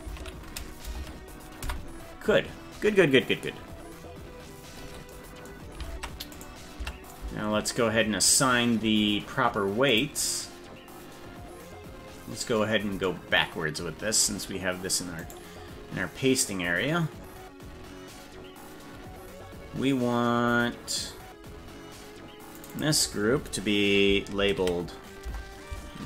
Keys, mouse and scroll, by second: 5.9 ctrl+Tab, 6.4 right click, 6.8 Tab, 9.9 click, 12.3-12.6 scroll down 2, 15.2 right click, 17.7-18.1 scroll down 4, 18.9-19.5 scroll down 6, 22.6 click, 22.7-26.0 drag.